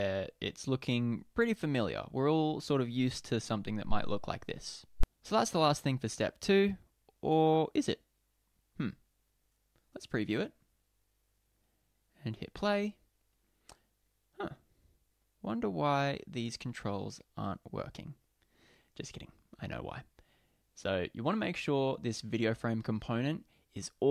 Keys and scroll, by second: 10.3 super+p.